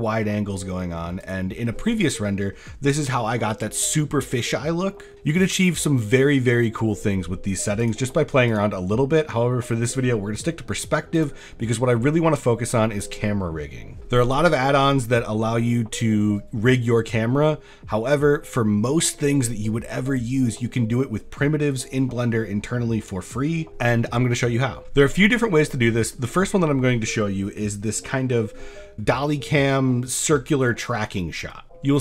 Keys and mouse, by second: 7.8 click, 13.9 z, 25.6 click, 26.3 shift+click, 31.7 click.